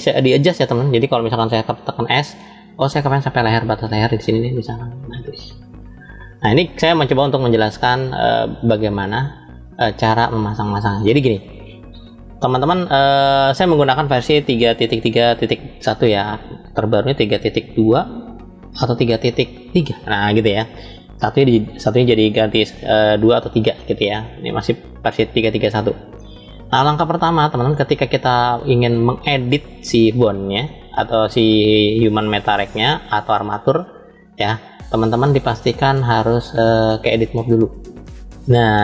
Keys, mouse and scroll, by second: 1.4-2.2 scroll down 1, 2.2 s, 5.5 click, 6.3-7.4 middle drag, 8.9-10.9 middle drag, 25.9-27.6 middle drag, 31.6-33.3 middle drag, 33.3 middle click, 36.1-38.5 drag.